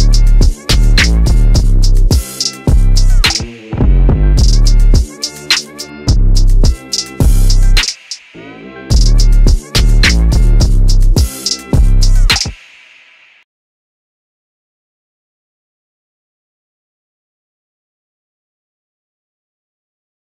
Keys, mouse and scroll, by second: 0.3 ctrl+z, 1.8 click, 7.4 s, 12.6 click, 14.2 middle click, 17.0 right click, 18.3-19.6 scroll down 1, 20.0 click.